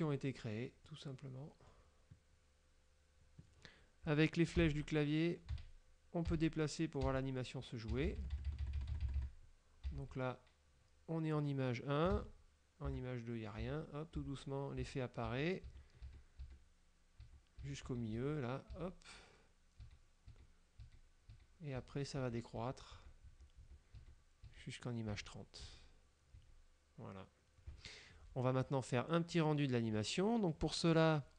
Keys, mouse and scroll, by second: 0.0-0.7 scroll down 3, 1.0-2.0 drag, 4.7 Left, 5.6 Left, 6.4 Left, 7.2 Left, 8.0 Left, 10.0 Left, 12.2 Right, 13.0 Right, 13.7 Right, 15.0 Right, 17.3 Right, 20.0 Right, 26.0 Right, 26.4 Right.